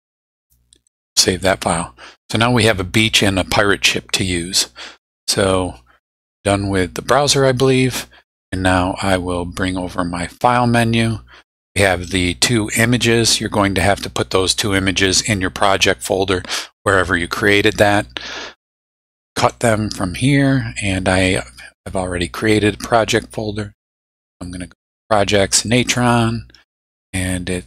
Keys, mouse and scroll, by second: 0.9 click, 7.1 click, 10.2-11.7 drag, 12.1 click, 13.9 middle click, 19.1 click, 21.3 click, 24.1 click, 25.7 click.